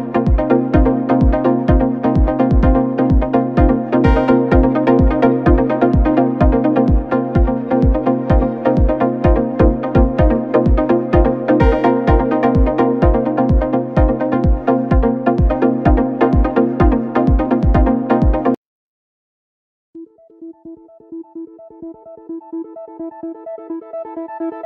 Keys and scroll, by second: 0.6 ctrl+-, 0.9 space, 5.5 ctrl+-, 6.5 ctrl+-, 7.5 ctrl+=, 7.7 space, 10.0 ctrl+-, 10.8 ctrl+=, 14.0 ctrl+=, 15.5 ctrl+=, 19.3 ctrl+-, 20.2 space, 20.5 ctrl+=, 21.2 ctrl+=, 23.5 ctrl+-.